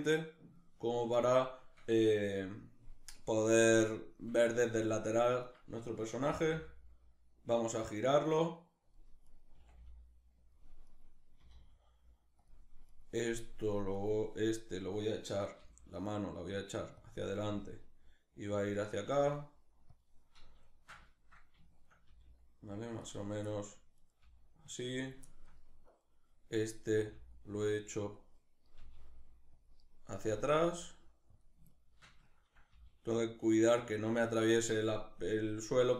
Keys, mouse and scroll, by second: 3.5-5.1 shift+middle drag, 5.1-5.9 right drag, 5.9 r, 8.5 click, 8.9 right click, 9.2 r, 10.1 click, 10.5 right click, 11.0 r, 12.1 click, 12.5 right click, 13.6-15.2 right drag, 15.2 g, 16.7 click, 17.1 g, 18.3 click, 18.6 right click, 18.8 g, 19.6 click, 20.3-22.7 shift+middle drag, 21.7 g, 22.7 click, 23.1 shift+middle click, 23.6 right click, 23.9 g, 24.7 click, 24.9 shift+middle click, 25.5 right click, 26.6 g, 27.7 click, 28.4 g, 29.3 click, 29.9 g, 31.0 click, 31.3-33.5 shift+middle drag, 32.3 g, 33.5 click.